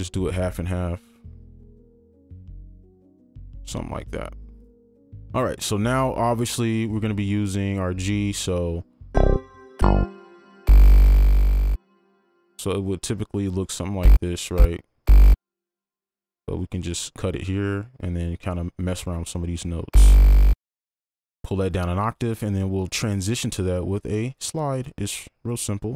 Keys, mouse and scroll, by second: 9.1 space, 10.0 space, 16.7 right click, 20.9 ctrl+click, 21.2 ctrl+Down, 21.8 right click, 22.3 click.